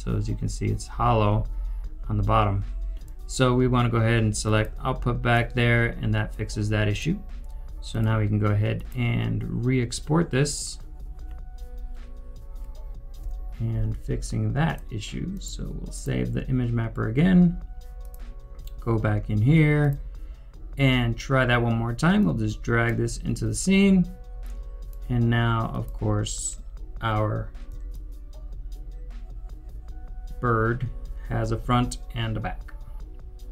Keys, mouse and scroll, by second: 9.8 double click, 9.9 scroll down 1, 13.1 u, 27.9 alt+click.